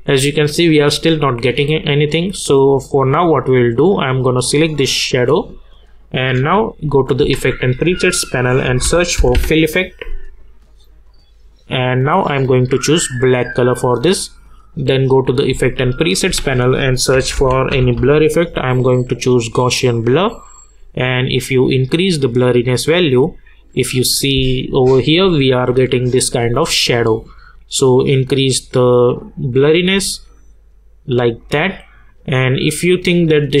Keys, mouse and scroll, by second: 4.1 click, 6.9 click, 7.3 ctrl+a, 8.4-9.8 typing, 10.9 click, 16.1 click, 16.3 ctrl+a, 16.9-18.4 typing, 19.9-23.3 drag, 23.3-23.9 scroll up 1, 24.0-24.3 scroll down 1, 24.3 space, 24.5 click, 25.9 scroll down 1, 26.6-27.9 scroll up 1, 27.9-32.1 drag, 32.5-33.6 scroll down 1.